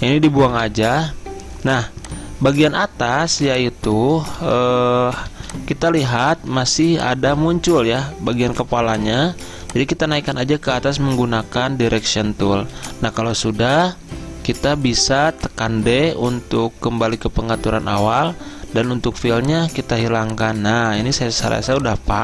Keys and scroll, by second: 0.6 Delete, 3.4 a, 4.5 ctrl+z, 5.4 z, 6.5 a, 12.6 z, 14.5 d, 20.1 z, 21.3 v.